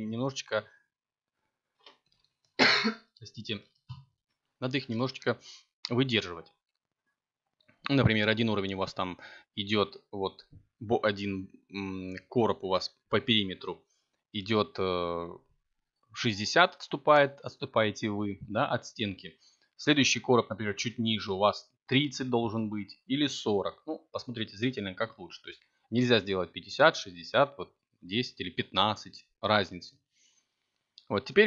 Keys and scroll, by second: 15.8 a, 16.8 c, 30.0 a, 31.1 b.